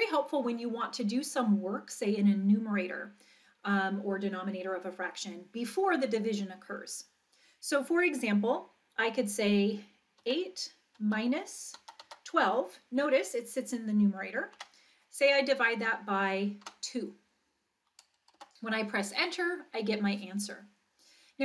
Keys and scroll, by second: 10.2-12.5 typing, 14.5 Down, 16.6 2, 18.4 Return.